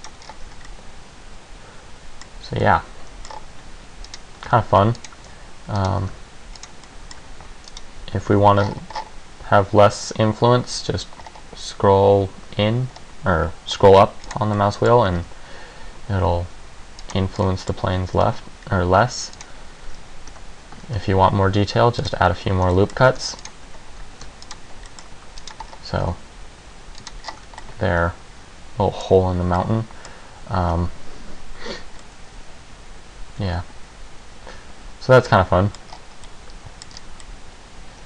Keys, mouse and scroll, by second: 0.2 click, 0.4 scroll down 3, 0.6 Tab, 0.8 middle click, 2.6 Tab, 2.8 middle click, 3.4-4.2 scroll up 3, 4.2 right click, 4.6 g, 5.2 click, 5.9 right click, 6.2 g, 6.8 click, 7.0 middle click, 7.8 right click, 8.3 g, 14.4 click, 14.7 middle click, 15.2 g, 17.2 click, 17.5 scroll down 1, 17.7 middle click, 18.3 ctrl+r, 21.0 ctrl+r, 23.0 middle click, 23.3 ctrl+r, 24.4 ctrl+r, 25.0 middle click, 25.6 right click, 25.8 scroll up 3, 26.1 g, 27.2 click, 27.4-27.8 scroll down 4, 27.6 Tab, 27.8 middle click, 29.8 middle click, 32.2 middle click, 36.0-36.6 scroll up 3, 36.4 middle click, 37.1 scroll down 3, 37.4 middle click.